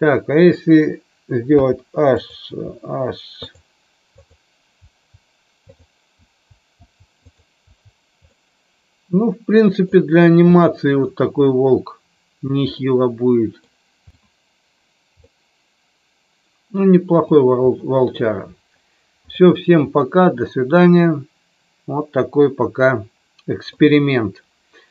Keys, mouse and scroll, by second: 1.4 h, 2.7 h, 6.1 h, 6.7 h, 7.2 click, 7.6 h, 8.2-9.8 middle drag, 10.5-11.1 middle drag, 12.7-13.6 middle drag, 15.3-17.2 middle drag, 20.0-23.7 middle drag.